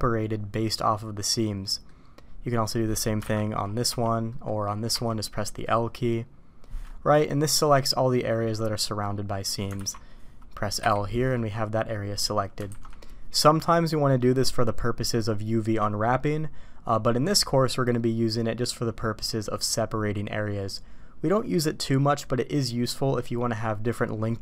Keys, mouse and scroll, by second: 1.6 middle click, 3.2 alt+a, 3.8 l, 4.2 click, 4.9 l, 5.4 click, 7.5 click, 7.7-9.5 middle drag, 9.7 alt+a, 10.7 l, 11.3 middle click, 12.6 alt+a.